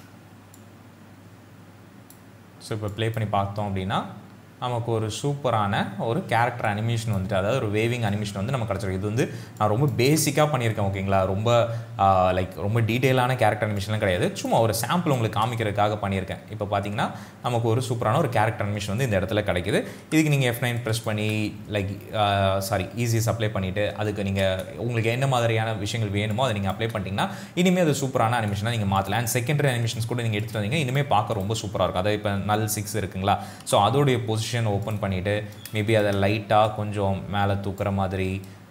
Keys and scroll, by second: 3.3 space, 6.3 space, 18.1 space, 24.5 space, 33.7 p.